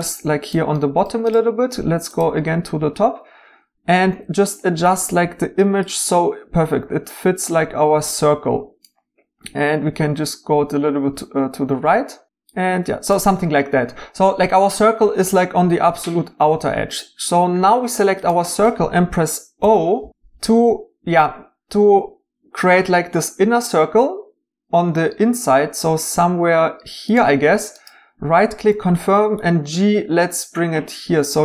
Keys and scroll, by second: 4.0 g, 19.6 o, 28.7 g.